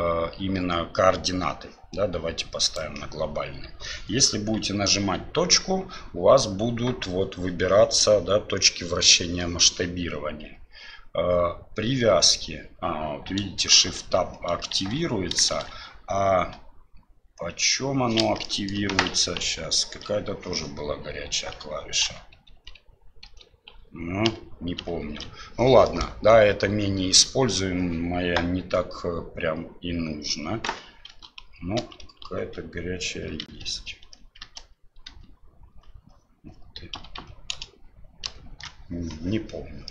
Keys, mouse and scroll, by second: 13.8 shift+Tab, 14.9 shift+Tab, 15.5 shift+Tab, 16.5 /, 18.4 shift+middle drag, 19.4 ctrl+., 22.0 ctrl+., 22.5 ctrl+,, 23.2 ctrl+,, 24.3 ctrl+/, 24.8 ctrl+/, 31.1 shift+., 31.8 shift+,, 32.4 shift+., 33.6 ctrl+,, 34.5 alt+., 35.0 alt+,, 36.9 alt+,, 37.5 alt+/, 38.2 alt+m.